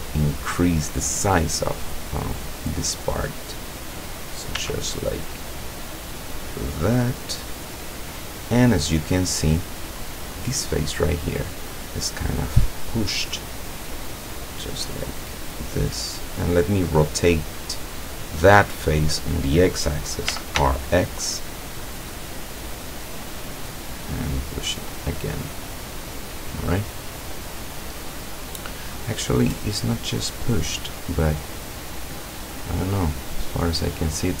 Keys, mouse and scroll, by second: 2.8-4.2 middle drag, 4.6 s, 7.5 click, 9.4 click, 10.0 right click, 12.0-12.7 middle drag, 13.9-16.3 drag, 17.4-18.3 middle drag, 18.3 scroll up 1, 20.3 r, 20.6 x, 22.9 click, 23.8-25.2 drag, 25.6-30.2 middle drag, 31.1-32.1 middle drag, 32.2 middle click, 32.7 middle click, 33.0 scroll down 1, 33.6-34.4 middle drag.